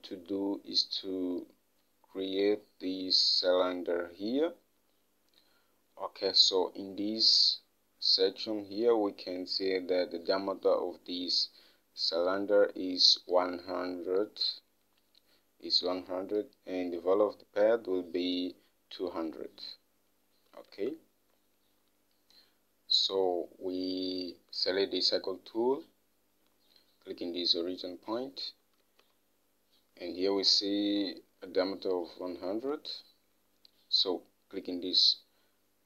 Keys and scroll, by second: 21.1 alt+Tab, 29.2 alt+Tab.